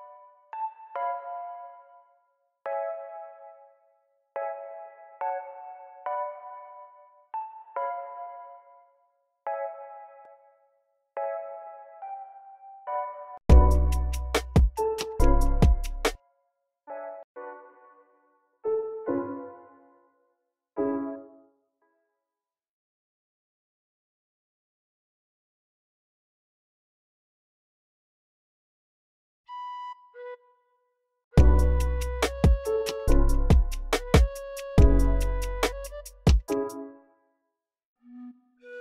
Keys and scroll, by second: 3.9 v, 4.4 v, 5.8 x, 6.5 x, 12.6 super+w, 13.1-13.7 typing, 16.0 s, 16.3 e, 16.6 super+a, 16.8 alt+shift+Down, 17.6-18.3 typing, 20.9 typing, 22.0 alt+super+s, 22.4 y, 29.1 super+k, 29.5-36.3 typing, 37.8 j, 38.3 x.